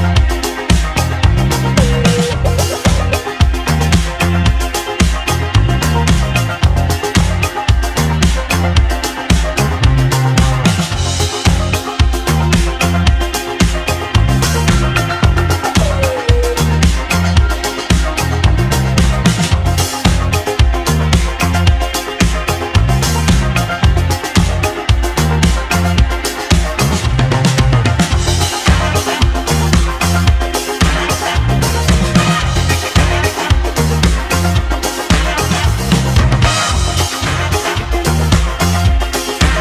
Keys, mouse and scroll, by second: 2.5 click, 3.9-4.4 scroll down 1, 4.4-5.7 scroll up 1, 5.7 shift+s, 6.7 shift+s, 7.8 shift+s, 8.5 shift+s, 8.9-9.4 scroll down 2, 9.4-10.0 scroll up 4, 10.0-10.4 shift+scroll down 2, 11.1 shift+a, 17.5-17.9 scroll down 3, 17.9-18.8 scroll up 2, 18.8 g, 22.0 s, 29.0 scroll up 1, 29.2-30.1 scroll down 4, 30.1 s, 32.9 g, 36.5-37.2 scroll up 4, 37.2-38.3 middle drag, 38.3 click, 39.4 ctrl+a.